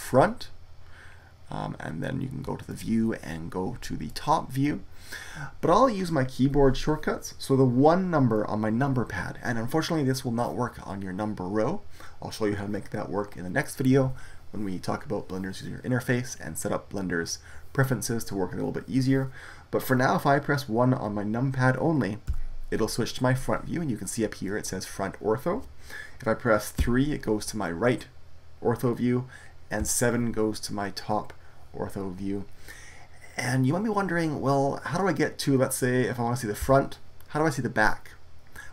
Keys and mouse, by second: 4.1 click, 22.2 KP_1, 26.7 KP_3, 29.7 KP_7, 36.5 KP_1.